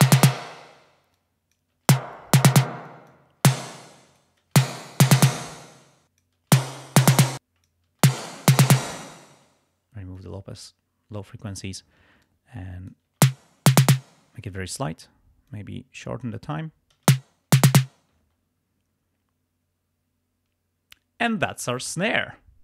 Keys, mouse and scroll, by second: 0.5 space, 1.1 click, 1.9 space, 2.2 click, 2.8 click, 2.8 space, 3.9 click, 4.6 space, 5.2 space, 5.8 click, 6.5 space, 7.1 space, 7.2 click, 8.0 space, 8.9 space, 10.2 click, 12.2-13.2 drag, 13.2 space, 14.0 space, 15.5 click, 17.0 space, 18.3 space.